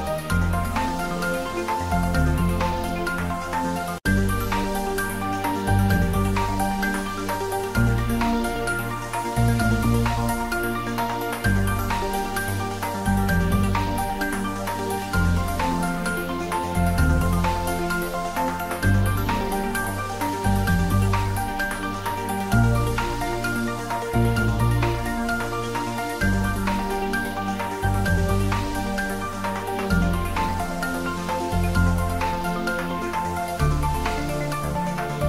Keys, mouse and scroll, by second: 1.2 middle click, 1.7 ctrl+z, 2.3-5.2 middle drag, 5.2 shift+click, 6.4 click, 9.2 middle click, 9.2 middle click, 10.5 Tab, 10.9 click, 11.3-12.6 typing, 12.9 click, 13.7 Tab, 14.4 middle click, 15.4 alt+e, 15.8 click, 18.4 click, 22.3 click, 23.8 s, 24.7 click, 25.0 ctrl+z, 26.7 alt+e, 27.1 click, 30.3 click, 31.3 shift+z, 32.4-33.3 typing.